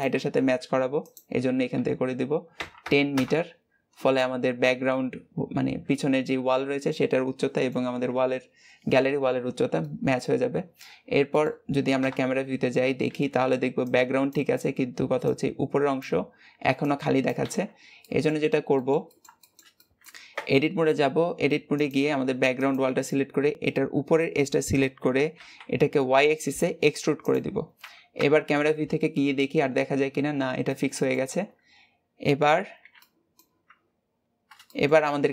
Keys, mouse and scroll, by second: 2.9-4.0 drag, 4.0-7.0 middle drag, 9.6-10.8 middle drag, 10.8-11.8 scroll down 2, 11.1 shift+middle click, 11.8 KP_0, 17.8 middle click, 18.3 scroll down 2, 18.5-20.1 middle drag, 20.1 Tab, 20.5-21.7 scroll up 2, 21.7 click, 22.5 click, 22.8 shift+middle click, 23.5-24.4 scroll down 1, 24.6 e, 27.9 KP_0, 29.1-29.8 scroll up 1, 30.4-33.4 middle drag, 33.4 Tab, 33.9-34.5 scroll down 2, 34.5-35.3 shift+middle drag.